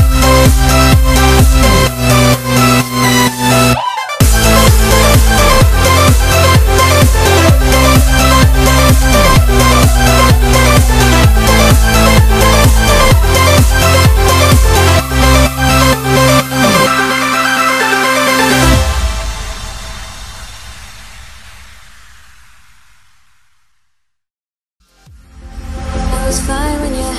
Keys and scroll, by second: 11.1 super+z.